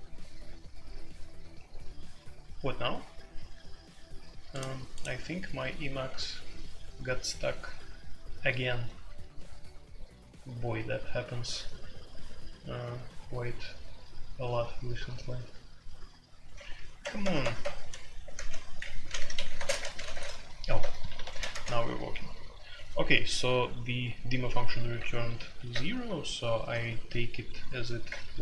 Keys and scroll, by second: 17.0 ctrl+g, 17.2 ctrl+g, 17.4 ctrl+g, 17.6 ctrl+g, 18.3 ctrl+`, 19.0-21.3 typing, 21.5 ctrl+`, 25.5 alt+p, 28.0 Return.